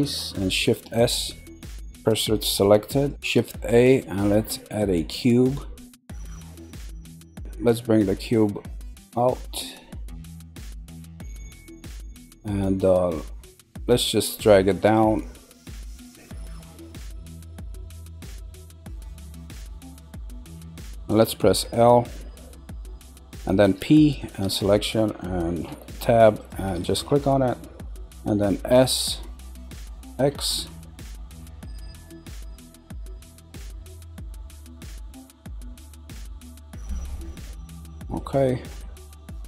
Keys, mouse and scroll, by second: 0.7 shift+s, 2.8 middle click, 3.1 scroll down 2, 3.2 shift+a, 5.8-7.7 middle drag, 7.7 click, 12.0-14.8 middle drag, 14.8 click, 16.0 click, 20.5 middle click, 21.6 l, 25.7 Tab, 26.4 click, 28.7 s, 37.6-38.4 middle drag, 38.8-39.4 middle drag.